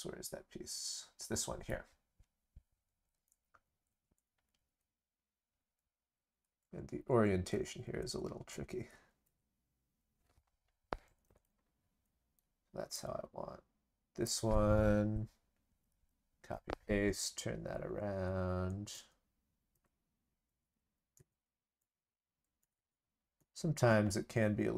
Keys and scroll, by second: 15.7 ctrl+c, 15.9 ctrl+v.